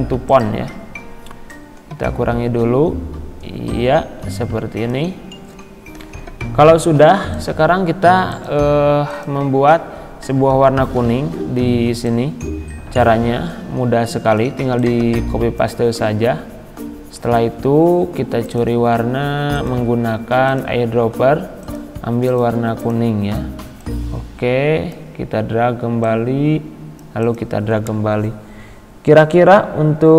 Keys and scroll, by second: 6.0 Right, 10.7 ctrl+c.